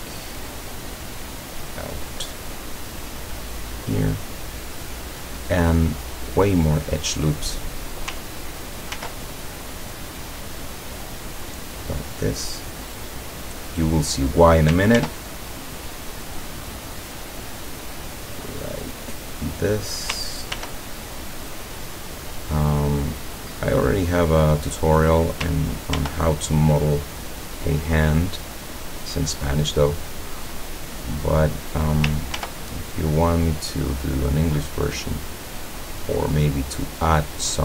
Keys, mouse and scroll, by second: 0.3 click, 3.8 click, 4.7 middle click, 5.7-6.5 scroll up 2, 9.0 ctrl+r, 10.0 click, 14.0 click, 15.0 ctrl+r, 15.5 ctrl+click, 19.6 click, 20.6 ctrl+r, 21.6 click, 24.8 click, 26.0 ctrl+r, 26.6 ctrl+click, 31.2 click, 32.4 ctrl+r, 33.2 click, 36.9 click.